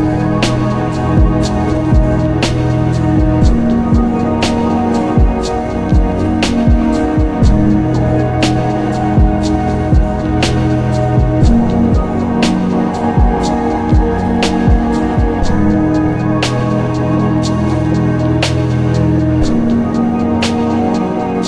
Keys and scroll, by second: 6.2 ctrl+z.